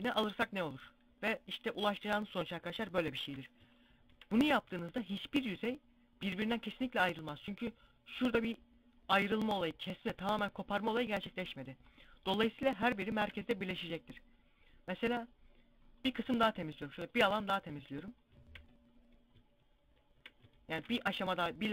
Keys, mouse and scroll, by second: 0.8 scroll down 1, 2.0 scroll down 1, 3.3 shift+middle click, 5.8 middle click, 11.5 scroll up 1, 11.7 scroll down 1, 12.2 scroll up 1, 12.6 shift+middle click, 15.4 right click, 16.7 shift+right click, 18.3 middle click, 19.5 shift+right click, 20.3 ctrl+e.